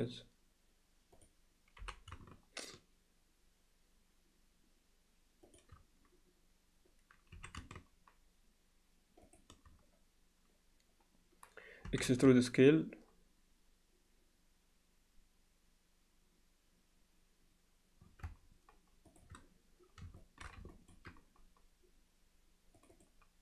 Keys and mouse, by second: 1.8 g, 7.4 s, 11.9 e, 20.2 alt+shift+middle drag, 20.7 ctrl+alt+middle click, 22.9 click.